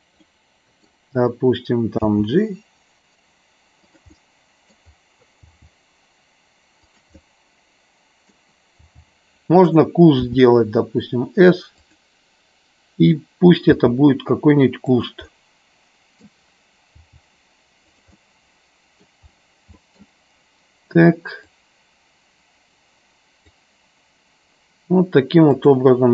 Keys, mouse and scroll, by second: 0.2 middle click, 3.9 click, 4.2 scroll up 1, 4.3 middle click, 6.9 click, 7.2 scroll up 1, 7.3-8.5 middle drag, 10.2 s, 11.9 click, 14.9 click, 15.3-16.5 middle drag, 18.1 middle click, 19.9 middle click, 21.5-23.6 drag, 25.6 click.